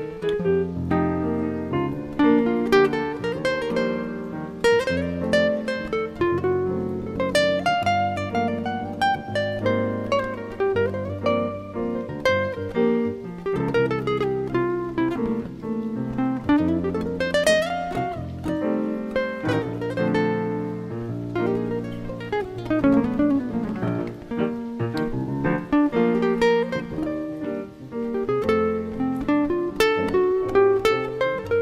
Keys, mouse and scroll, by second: 1.7 click, 5.8 click, 7.5 click, 8.0 middle click, 12.3 scroll down 3, 12.6-13.4 scroll up 3, 16.7 click, 18.0 click, 18.7 click, 19.0 click, 19.5 click, 19.7 click, 21.4 shift+n, 25.1 click, 27.5 click.